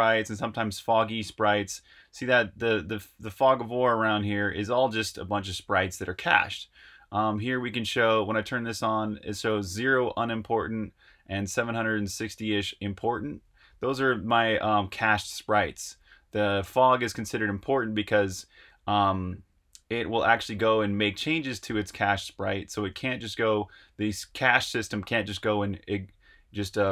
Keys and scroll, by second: 1.5 j, 3.3-6.0 typing, 13.3-21.9 typing, 23.8 j, 25.9 typing.